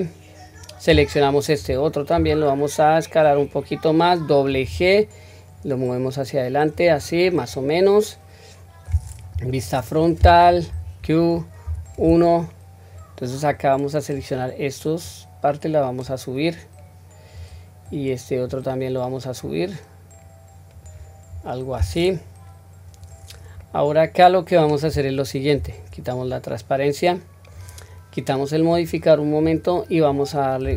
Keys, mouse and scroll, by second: 1.1 alt+click, 2.2 s, 7.5-9.0 middle drag, 9.3 KP_1, 10.7 q, 11.6 1, 13.5-14.2 drag, 15.0 click, 17.3 click, 17.9-18.5 drag, 19.4-20.8 drag, 21.3-22.4 scroll down 1, 23.6-24.6 middle drag, 23.6-24.6 scroll down 2, 25.5 q, 26.3-26.6 scroll up 1, 26.9-27.6 middle drag, 28.7 click, 29.4-30.0 scroll down 1.